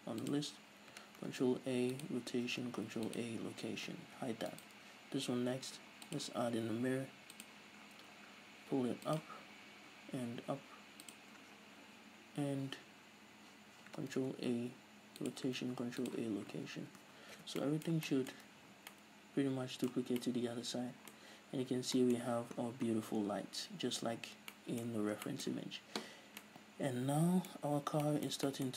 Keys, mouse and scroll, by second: 0.6 click, 1.5 ctrl+a, 4.4 h, 4.9 right click, 6.5-9.8 drag, 8.2-9.5 scroll down 2, 9.8-11.5 scroll up 2, 11.5 click, 11.8 scroll up 1, 14.5 ctrl+a, 16.7 scroll down 1, 16.8 a, 17.8 alt+h, 18.0-28.7 middle drag, 19.0 a, 19.1 scroll down 1, 20.4 scroll down 1, 21.5-22.0 scroll up 2, 22.0-22.3 scroll down 2, 23.0 scroll down 2, 23.1 scroll up 2, 23.3-24.0 scroll down 2, 24.0-24.7 scroll up 2, 25.4 scroll down 1, 26.6 scroll down 1, 28.0 scroll up 1.